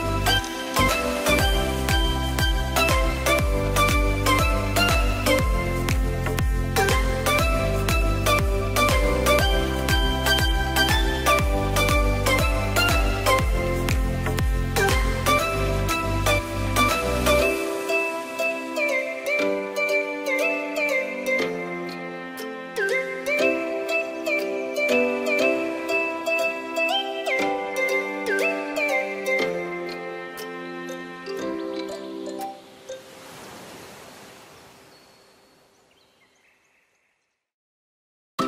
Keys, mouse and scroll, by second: 4.6-5.2 scroll down 1, 5.2 click, 7.7 click, 8.0-8.7 scroll down 4, 8.7-11.2 middle drag, 11.5-14.1 drag, 15.5 drag, 18.8-21.4 drag, 21.5-22.9 drag, 22.9 BackSpace, 24.9 click, 25.5-26.5 shift+middle drag, 26.5-27.5 scroll up 1, 27.6 click, 28.7 click, 30.2-33.7 drag, 35.2 click, 36.8 click, 37.6-38.1 scroll up 1, 38.3-38.4 shift+middle drag.